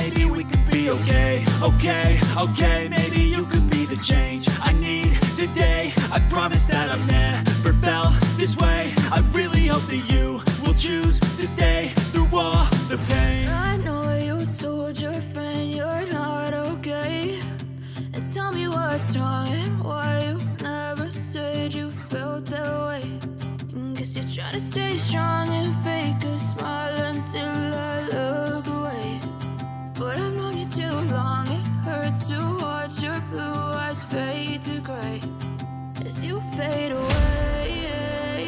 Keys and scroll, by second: 23.0 ctrl+v, 25.5 F4.